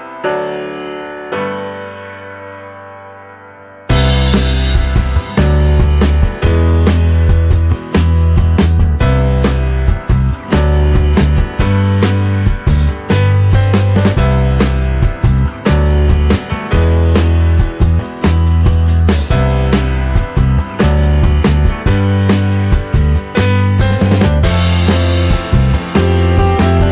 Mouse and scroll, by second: 10.0 click, 12.3 click, 15.1 click, 19.1 middle click, 21.0 click, 22.0 click, 22.5-22.9 scroll down 2, 24.0-24.3 scroll down 2, 24.8-25.1 scroll down 2, 25.6-26.4 scroll up 4.